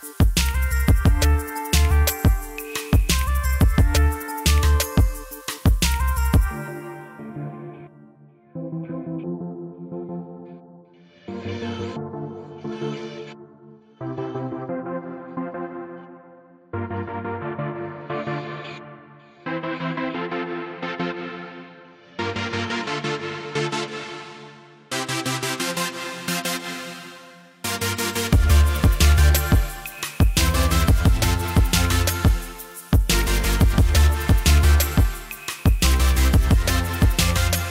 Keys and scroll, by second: 6.7-8.3 typing, 14.3 ctrl+s, 21.0-22.3 typing.